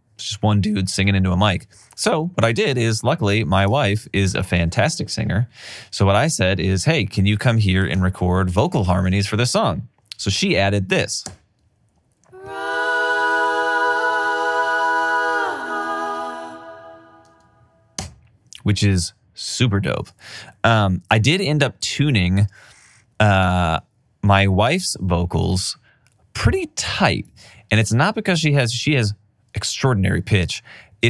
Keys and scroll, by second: 11.5 space, 18.7 space, 25.2 alt+super+w, 28.2 alt+super+w.